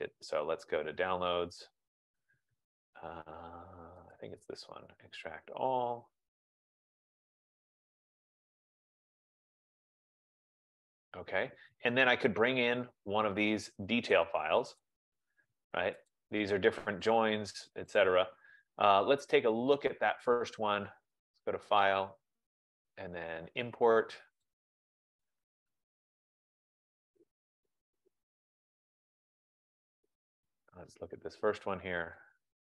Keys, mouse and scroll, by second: 0.5 click, 1.4 click, 4.3 middle click, 7.0 click, 8.8 click, 12.8 click, 14.9-15.9 drag, 17.2 click, 18.2 click, 21.4 click, 21.5 click, 24.7 click, 27.5 click, 28.8 click, 29.1 click, 30.7 click.